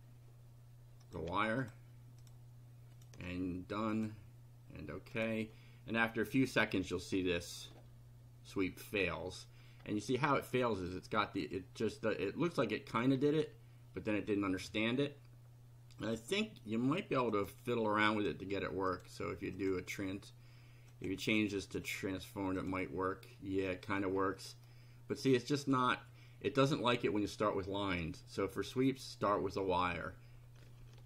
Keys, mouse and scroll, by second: 1.0 click, 1.6 ctrl+click, 2.2 ctrl+click, 3.0 ctrl+click, 3.9 click, 5.2 click, 9.8 scroll up 2, 13.1 scroll down 2, 16.0 click, 17.3 click, 18.2 click, 18.9 click, 19.6 click, 20.9 click, 21.8 click, 22.6 click, 23.6-24.2 middle drag, 24.3 middle click, 25.3-25.8 middle drag.